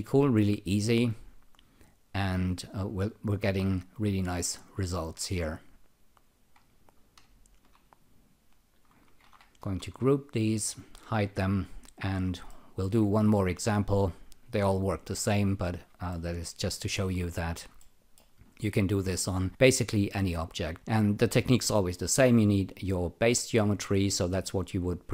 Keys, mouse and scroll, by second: 5.3 click, 6.1 click, 6.9 click, 7.5 ctrl+click, 9.2 alt+g, 10.8 alt+shift+click, 12.4 alt+middle click, 14.4 click, 16.1 alt+middle click, 17.8 alt+middle click, 18.4 alt+right click.